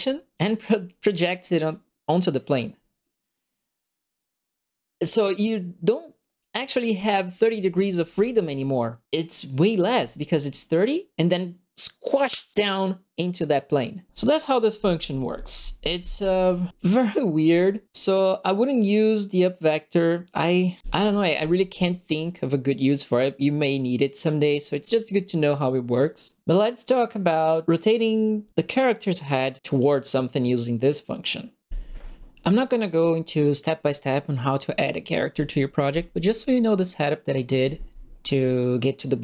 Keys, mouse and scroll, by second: 0.3 click, 1.6-6.3 drag, 6.9-8.7 right drag, 7.0 d, 7.3 w, 8.1 q, 9.7 right click, 9.8 s.